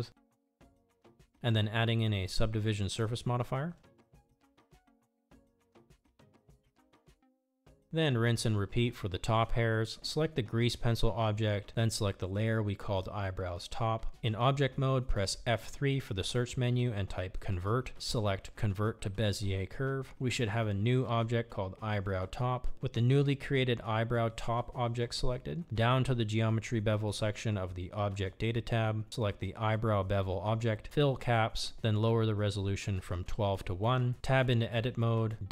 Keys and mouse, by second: 2.9-7.0 drag, 10.6 click, 10.9 middle click, 11.2 KP_1, 13.4 click, 14.3 F3, 19.4 click, 21.0 click, 22.0 click, 23.7 Tab, 24.5 a, 29.1 click, 29.5-30.5 drag, 31.3 g, 33.7-34.8 drag.